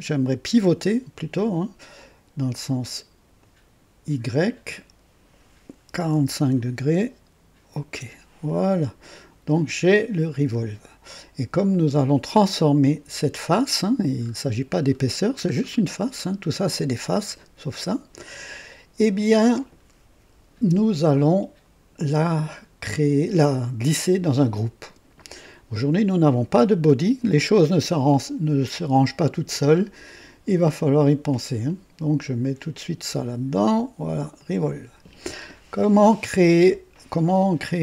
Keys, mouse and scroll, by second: 1.9 click, 3.3 click, 4.7 click, 5.8 KP_4, 5.9 KP_4, 6.1 KP_5, 7.7 click, 8.6 click, 10.4 click, 14.2-15.1 scroll up 4, 15.5-16.1 scroll down 3, 23.8 click, 31.6-32.5 drag, 33.6 click, 34.4 click.